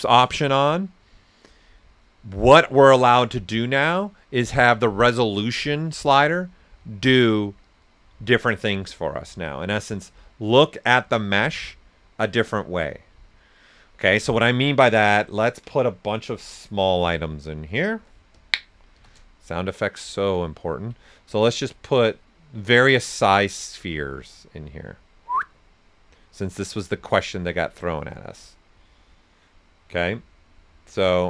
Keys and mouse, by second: 15.2 ctrl+right click, 16.2-18.9 typing, 18.3 click, 19.0-20.5 drag, 20.5 ctrl+right click, 21.5-23.5 drag, 23.5 right click, 24.0-31.2 drag.